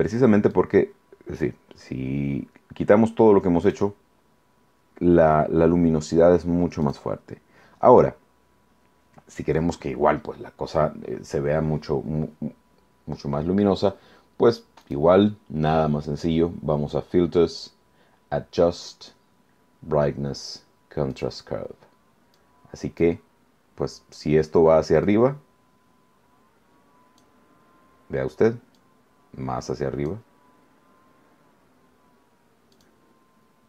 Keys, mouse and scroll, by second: 0.5-1.6 drag, 3.7 click, 6.9 click, 14.9 click, 21.1 click, 22.3-23.2 drag, 25.1-27.4 drag, 28.8-30.3 drag, 32.7 click.